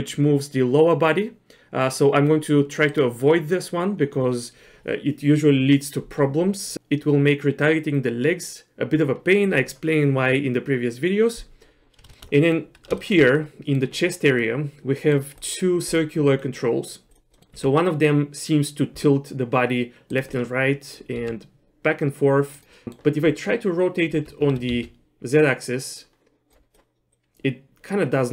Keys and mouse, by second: 11.8 middle click, 12.1 shift+middle click, 12.4 middle click, 13.0 shift+middle click, 13.3 middle click, 14.4 middle click, 16.4 middle click, 17.1 click, 17.3 middle click, 17.7 r, 20.3 middle click, 21.2 r, 22.7 middle click, 24.1 r, 27.1-28.3 drag.